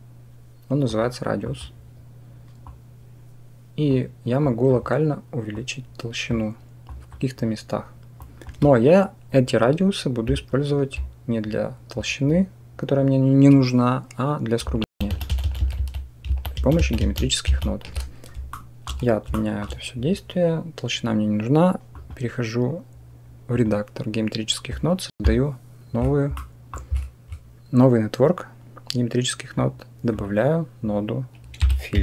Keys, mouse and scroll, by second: 1.3 click, 2.6-3.8 drag, 4.3 click, 5.5 click, 6.8 click, 8.1 click, 14.7 ctrl+z, 15.0 ctrl+z, 15.1 ctrl+z, 15.3 ctrl+z, 15.4 ctrl+z, 15.6 ctrl+z, 16.1 ctrl+z, 16.4 ctrl+z, 16.6 ctrl+z, 16.9 ctrl+z, 17.3 ctrl+z, 18.4-18.7 shift+drag, 19.2-19.5 shift+drag, 21.8-26.3 drag, 26.3 middle click, 29.4-32.0 drag.